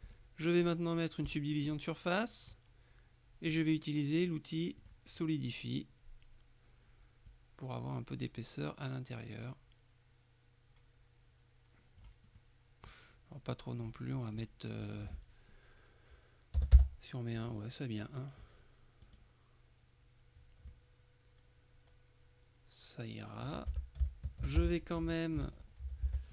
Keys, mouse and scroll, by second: 0.1 click, 1.3 click, 3.6 click, 4.9 click, 7.3-12.6 drag, 13.9-15.0 drag, 16.7 BackSpace, 16.8 Return, 18.1 middle click, 19.1 right click, 20.8-22.4 middle drag, 22.4-24.0 drag, 23.8 Tab, 24.2-25.3 shift+middle drag, 24.7 shift+Tab, 25.6-26.1 scroll up 2, 26.1 Tab, 26.1 scroll up 1.